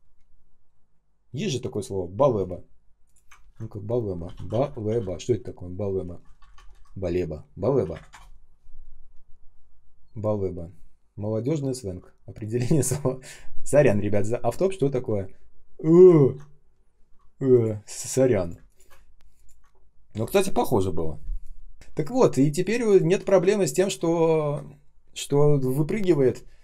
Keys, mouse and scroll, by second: 3.3 ctrl+e, 3.9-4.8 typing, 7.6-8.3 typing, 16.1 ctrl+ц, 18.4 space, 18.9 ctrl+scroll up 1, 21.9 shift+click, 22.2 shift+click, 22.5 shift+click, 22.8 shift+click.